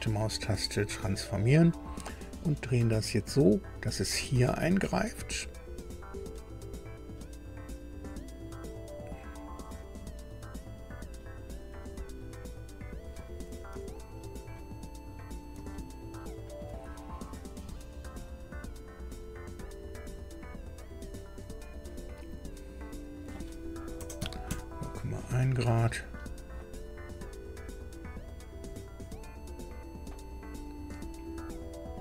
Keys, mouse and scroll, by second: 0.7 click, 1.9 scroll up 2, 2.7 scroll up 2, 3.7-11.9 drag, 12.2-12.6 scroll up 2, 13.0 scroll down 2, 13.9 shift+middle click, 15.1 scroll up 2, 15.7-16.7 shift+middle drag, 17.6-21.9 drag, 23.0 click, 23.9 KP_0, 24.2 KP_Decimal, 24.5 KP_1, 26.4 click, 26.9-28.2 drag, 28.6-32.0 drag.